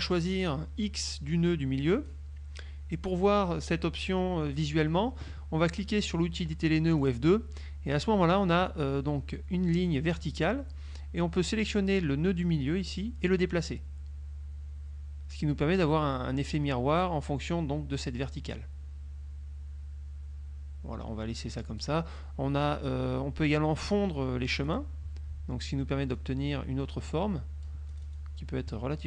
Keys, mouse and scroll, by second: 2.1 click, 7.2 click, 12.6-22.1 drag, 24.8 click, 26.2-28.4 drag.